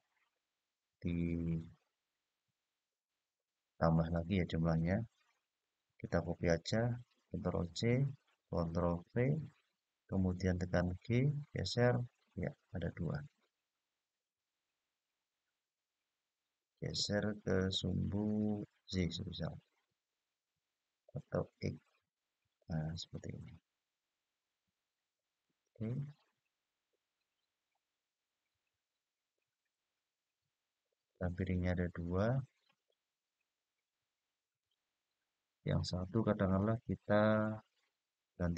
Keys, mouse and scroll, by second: 1.0-2.1 middle drag, 2.4-3.9 scroll up 2, 7.3 ctrl+c, 8.9 ctrl+v, 10.8-18.6 g, 19.2-20.9 y, 21.8-25.1 x, 25.4 click, 26.1-27.1 scroll down 1, 27.1-27.8 scroll down 1, 27.8-28.6 scroll down 1, 29.1-32.6 middle drag, 35.7 click.